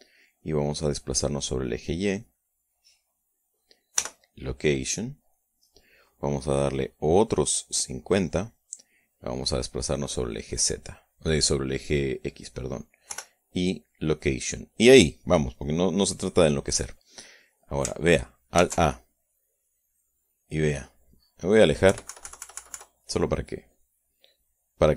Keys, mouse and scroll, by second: 1.1-4.0 drag, 4.6 i, 5.9 click, 8.3 click, 9.5-13.0 drag, 13.7 i, 14.7 click, 17.2 click, 19.2 alt+a, 22.5 KP_Subtract.